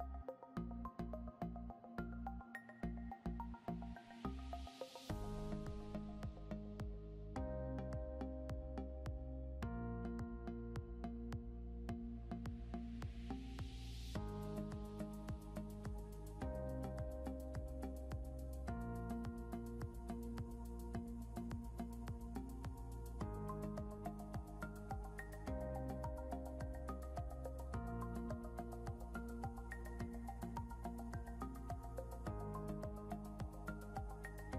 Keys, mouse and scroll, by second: 0.4 click, 1.6 Caps_Lock, 3.7 a, 5.9 alt+Num_Lock, 6.4-8.1 typing, 8.9 Return, 11.7 click, 20.8 click, 22.1 c, 23.2 click, 27.1 click, 33.1 alt+Num_Lock, 33.7 j.